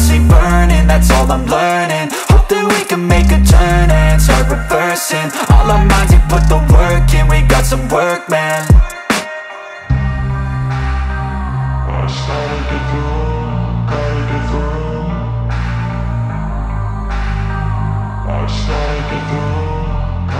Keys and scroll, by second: 14.3 space, 15.7 space.